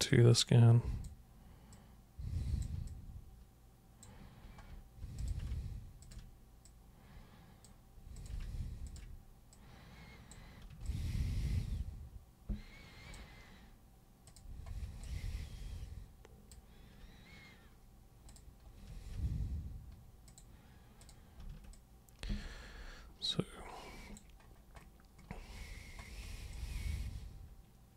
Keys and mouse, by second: 0.3-1.0 alt+drag, 1.7 click, 2.8-4.0 alt+drag, 5.2 click, 6.0 ctrl+shift+super+click, 6.6 super+click, 8.1 super+click, 8.8 ctrl+shift+super+click, 9.5 super+click, 10.8-13.1 alt+super+drag, 14.2 super+click, 15.0-16.5 alt+super+drag, 18.3 super+click, 20.3 super+click, 21.0 super+click, 21.7-24.1 alt+super+drag, 26.5-27.9 alt+super+drag.